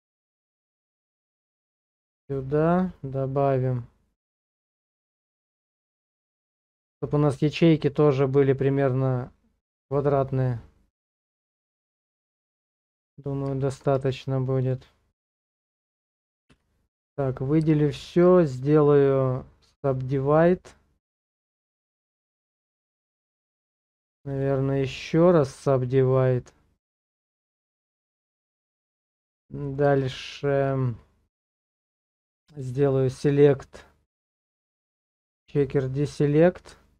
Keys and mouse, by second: 12.3 click, 13.3 middle click, 14.0 Tab, 14.6 click, 16.5 a, 17.3 middle click, 17.8 shift+middle click, 18.6-19.9 drag, 21.5-22.6 middle drag, 23.1 shift+middle click, 24.4-25.5 drag, 26.3-28.1 middle drag, 28.5 shift+middle click, 29.0 middle click, 30.1 shift+middle click, 32.5-35.5 drag, 36.8 shift+click.